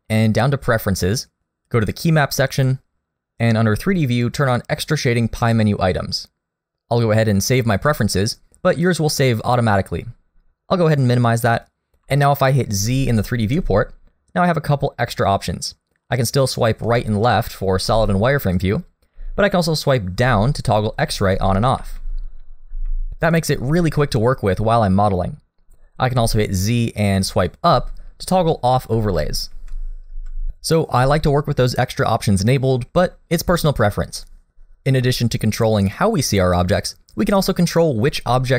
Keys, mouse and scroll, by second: 13.6 z, 17.3 z, 19.2 z, 21.1 z, 21.8 z, 22.7 z, 23.9 middle click, 24.3-24.9 scroll up 2, 26.2 z, 28.2-28.9 scroll down 2, 28.9 z, 29.5 z, 30.3 z.